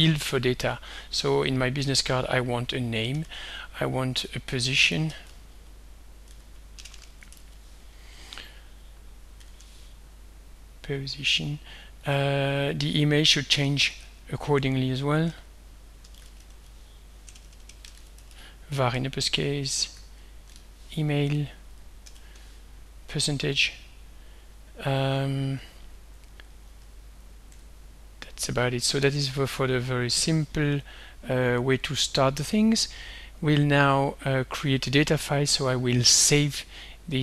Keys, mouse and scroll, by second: 0.5 click, 1.5 Home, 1.9 shift+End, 3.2-7.9 typing, 9.4 shift+5, 12.1 click, 12.8 click, 13.2 click, 15.4-20.6 typing, 22.1 shift+5, 27.5 Escape, 28.7-30.0 drag.